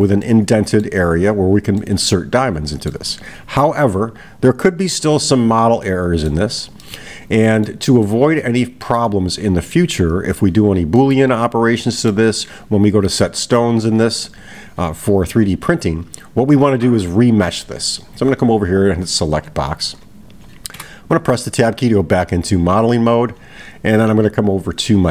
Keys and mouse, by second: 0.2-0.9 middle drag, 1.8-3.1 middle drag, 5.8-6.3 middle drag, 6.8-7.7 middle drag, 8.1-9.8 middle drag, 11.0-12.2 middle drag.